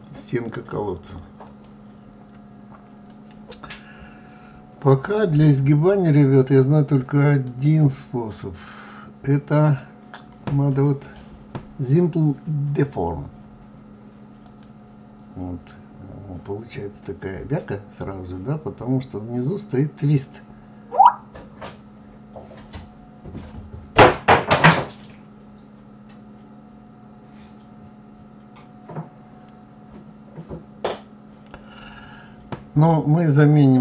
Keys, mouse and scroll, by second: 7.7 click.